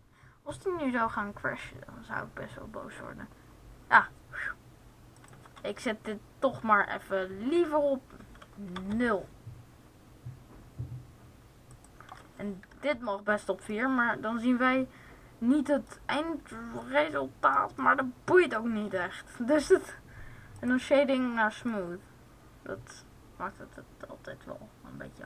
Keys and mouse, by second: 11.9-13.5 drag.